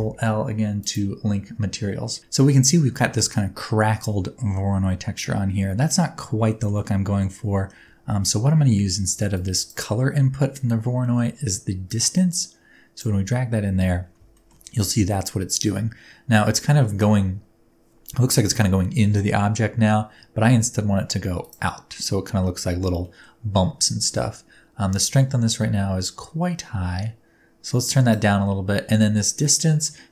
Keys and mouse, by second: 6.5 shift+middle click, 7.3 middle click, 8.2 middle click, 9.3-9.7 drag, 11.0 middle click, 11.9-13.0 drag, 14.4 shift+middle click, 21.4 middle click, 23.0 middle click, 24.0 middle click, 25.0-28.1 middle drag.